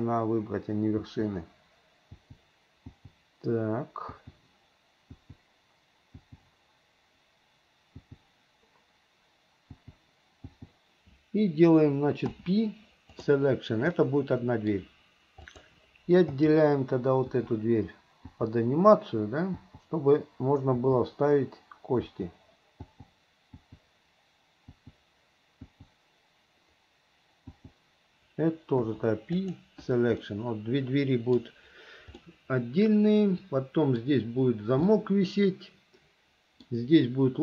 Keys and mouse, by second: 1.2 l, 2.4 l, 3.1 l, 4.3 l, 5.3 l, 6.4 l, 8.2 l, 10.0 l, 10.7 l, 12.4 p, 14.1 click, 14.5 right click, 15.6 click, 16.5 l, 17.5 l, 18.5 l, 19.8 l, 21.0 l, 22.3 l, 23.0 l, 23.7 l, 25.0 l, 25.9 click, 27.8 click, 28.9 p, 30.4-31.5 middle drag, 32.5 middle click, 32.7-34.2 drag, 32.7-34.2 right drag, 35.1-36.5 drag, 35.1-36.5 right drag, 36.5 middle click.